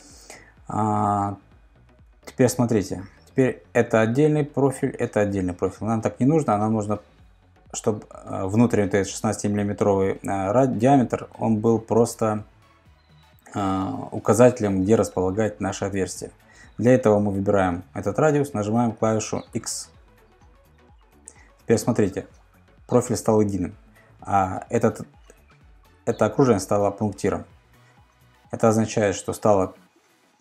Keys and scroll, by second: 2.0 super+Tab, 9.0 super+Tab, 16.3 super+Tab, 19.5 x.